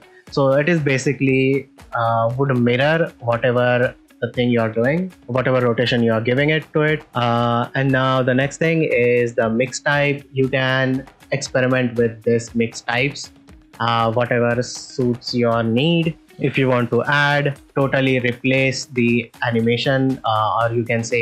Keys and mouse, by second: 0.8 right click, 2.4 r, 2.5 y, 5.1 z, 9.2-12.3 drag, 14.2 click, 15.7 r, 18.6-20.3 drag.